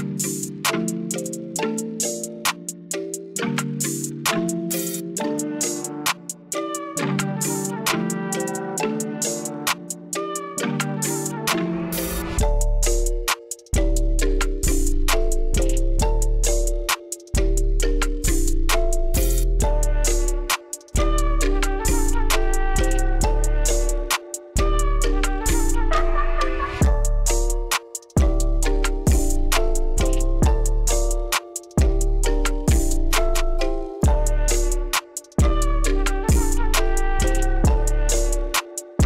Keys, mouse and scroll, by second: 0.6 click, 2.6 click, 5.4 click, 7.8 KP_1, 8.5 Return, 12.0 click, 13.7 click, 14.8 click, 17.4 click, 20.8-21.8 drag, 22.8 click, 29.8 click, 31.0 click, 35.3 click, 38.0 click.